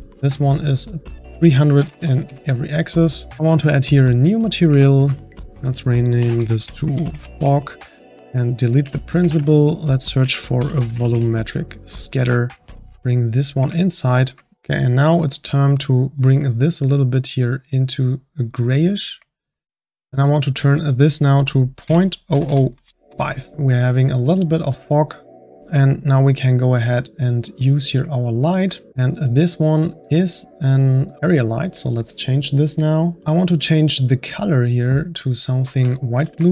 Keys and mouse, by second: 0.0-1.9 drag, 1.9 KP_0, 3.5-8.7 drag, 8.1-8.7 middle drag, 8.9 x, 9.0 click, 9.3 shift+a, 12.6-13.1 drag, 13.8 ctrl+middle click, 14.5 click, 16.2 click, 18.7-22.4 drag, 22.4 KP_0, 23.0 click, 23.1 KP_0, 24.8 click, 25.6 click, 27.6 click, 28.2-30.1 middle drag, 30.1-30.6 drag, 31.3 click, 34.0 click.